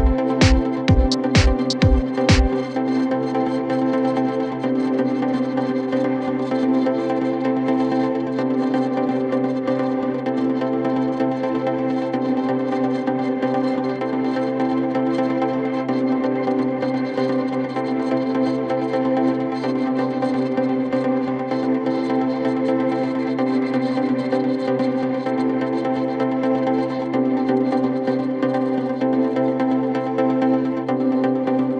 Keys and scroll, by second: 1.3 ], 16.5 ctrl+z, 19.8 ctrl+z, 26.9 4.